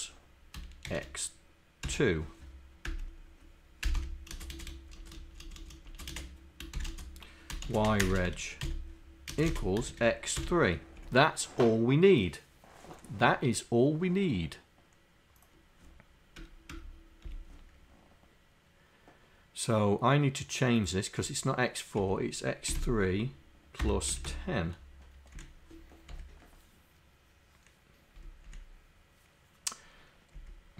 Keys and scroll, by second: 6.6 ., 7.5 ..